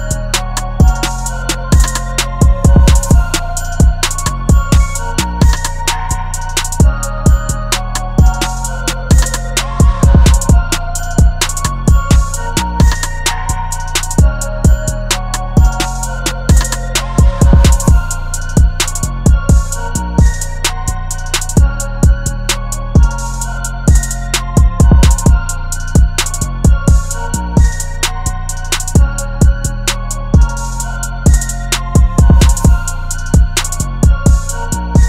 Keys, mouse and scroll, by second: 7.4-7.9 typing, 19.5 right click, 21.4 double click, 30.9 double click.